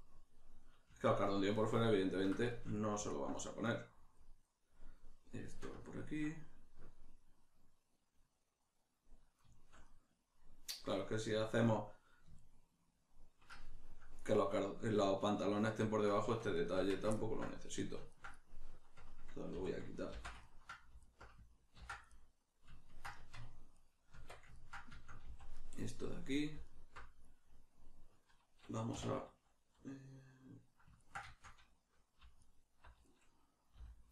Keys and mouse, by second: 16.2 Tab, 16.5 right click, 16.7 Tab, 17.1-21.0 ctrl+middle drag, 19.6 2, 20.1 ctrl+x, 21.0 alt+right click, 21.8 ctrl+x, 22.1-23.8 middle drag, 23.2 Tab, 23.8 right click, 24.1 Tab, 24.6-26.6 ctrl+middle drag, 25.2 z, 26.6 alt+right click, 29.0 1, 31.0-32.4 ctrl+shift+middle drag, 32.4 alt+right click, 33.8 b.